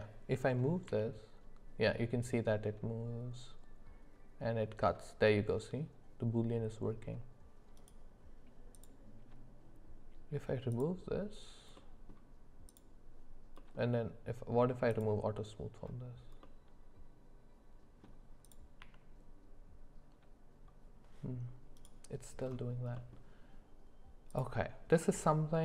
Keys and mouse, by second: 0.8 g, 10.7 click, 11.7 middle click, 12.7 click, 13.6 middle click, 15.1 click, 16.4-18.0 middle drag, 18.9 g, 22.9 middle click, 24.3 click.